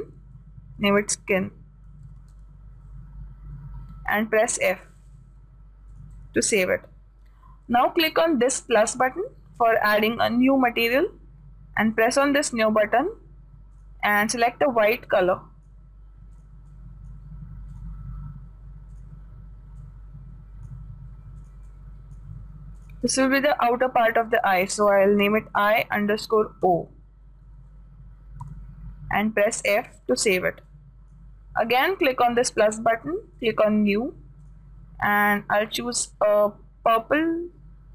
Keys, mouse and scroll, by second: 1.4 BackSpace, 6.3-8.2 drag, 9.3-11.1 drag, 12.4-16.0 drag, 17.1-21.1 drag, 22.0-24.9 drag, 30.1-36.6 drag.